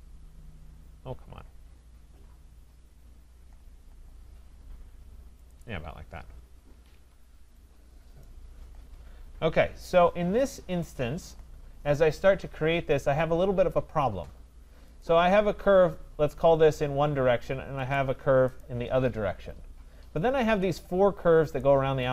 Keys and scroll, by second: 6.7 Escape.